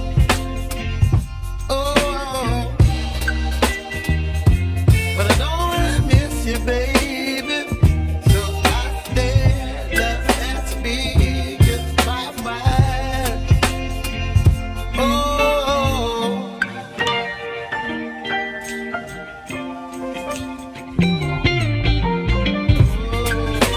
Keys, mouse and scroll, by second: 0.8 ctrl+z, 1.4 ctrl+z, 2.3 ctrl+shift+z, 3.6-4.9 middle drag, 4.9-5.7 scroll up 1, 6.2 click, 7.4 middle click, 8.2-8.8 scroll down 2, 8.8 shift+middle click, 9.7 shift+click, 10.3-12.8 middle drag, 15.5 x, 19.2-20.5 middle drag, 20.5 click, 21.1 shift+click, 21.6 shift+click, 21.9-23.6 middle drag, 23.6 shift+click.